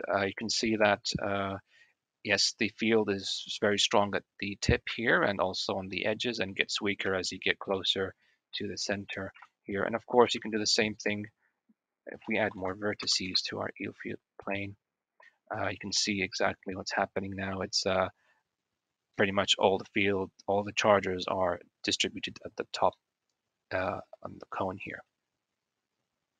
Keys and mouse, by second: 0.2-0.8 drag, 1.4-1.8 drag, 2.2 click, 4.8 shift+click, 5.0 shift+middle click, 5.8-6.2 middle drag, 6.9 shift+middle click, 7.6 shift+middle drag, 8.4 middle drag, 9.2 KP_1, 10.3 shift+click, 11.7-14.7 drag, 15.8-16.2 drag, 16.2 middle click, 16.5-18.1 drag, 19.0 click, 22.8-23.4 drag, 23.7 click, 24.7 drag.